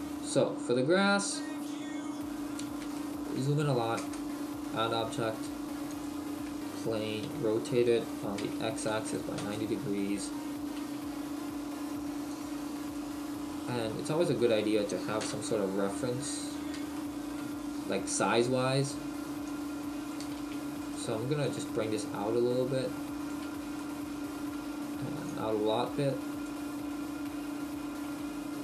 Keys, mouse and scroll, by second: 0.6-1.0 scroll up 2, 1.3-2.1 scroll up 5, 3.0 shift+middle click, 3.0-3.5 scroll up 8, 3.5-4.2 scroll up 2, 4.0 space, 12.4 click, 12.8 right click, 13.9 middle click, 15.2 KP_1, 16.1-16.8 scroll down 1, 17.0 shift+middle click, 17.7-18.1 scroll up 2, 18.4 click, 18.6 click, 18.8 click, 19.5 click, 20.4 ctrl+z, 20.8 right click, 21.4 click, 23.8 shift+middle click, 25.2 click, 26.7-28.0 scroll up 6, 28.2 s.